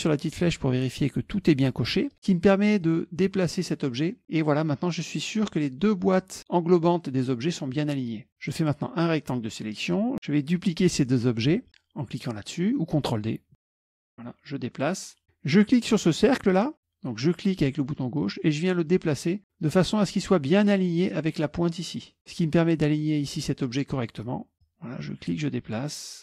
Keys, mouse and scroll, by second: 2.9-4.4 drag, 4.9-5.9 drag, 7.1-8.3 drag, 8.5-10.1 drag, 13.7 ctrl+d, 14.3-15.4 drag, 17.4-21.1 drag, 22.2 click, 24.6-26.2 drag.